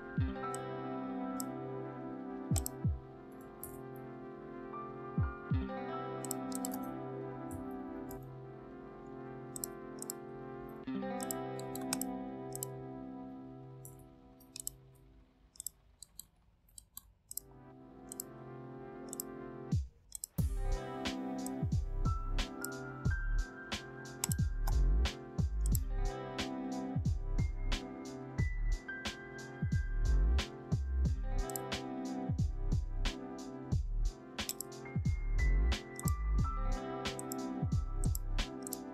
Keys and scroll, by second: 3.5 ctrl+shift+f, 6.5 ctrl+a, 7.2-8.1 typing, 10.4 ctrl+shift+a, 13.8 ctrl+d.